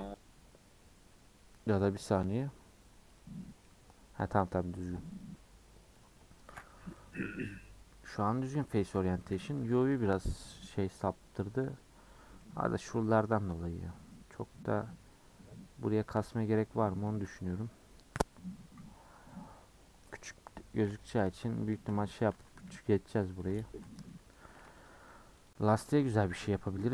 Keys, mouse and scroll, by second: 0.0-3.6 drag, 3.6-5.9 middle drag, 5.9 click, 7.0 middle click, 7.3-7.6 scroll up 5, 7.6 middle click, 8.1 scroll down 1, 8.3 Tab, 8.5 middle click, 9.2 a, 10.1 u, 12.4-16.5 middle drag, 20.9 /, 21.5-22.1 scroll down 4, 22.3 Tab, 23.1 h, 23.5 click, 23.7 Tab, 24.0 scroll up 2, 24.1 middle click, 24.4-24.9 scroll down 1, 24.9 alt+click, 25.5 alt+click, 26.2 a.